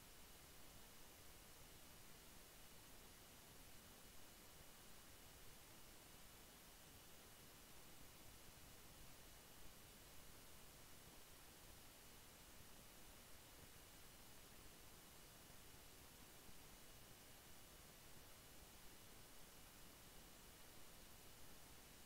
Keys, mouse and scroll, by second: 2.3 ctrl+q, 5.0-10.8 drag, 10.8 click, 12.8 click, 16.9 click, 19.8 click.